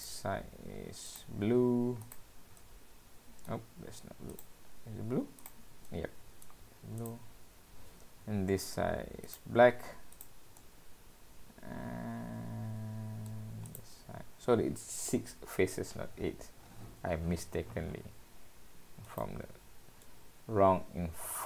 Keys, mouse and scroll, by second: 0.0 click, 1.1 click, 2.1 click, 2.6 middle click, 5.5 click, 5.9 middle click, 7.0 click, 7.2-7.9 scroll up 3, 9.3 click, 10.2 click, 10.6 middle click, 13.7 click, 14.1 scroll down 2, 19.1 click, 20.0 middle click.